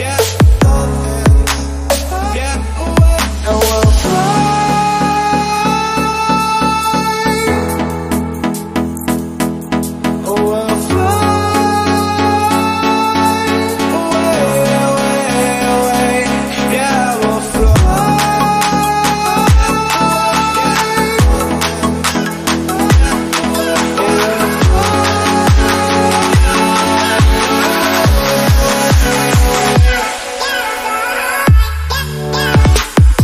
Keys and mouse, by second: 8.5 ctrl+x, 14.3-19.7 drag, 19.7 x, 21.6-22.6 drag, 22.6 g, 25.7 click, 27.4 click, 28.2 a, 29.8 drag, 30.4 click, 31.3 click.